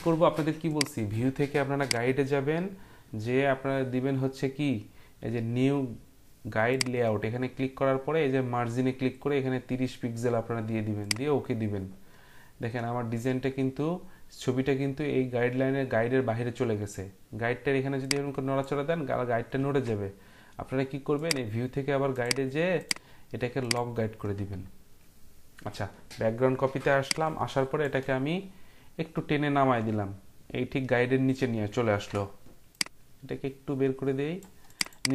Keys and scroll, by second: 19.6 ctrl+z, 32.2 ctrl+t.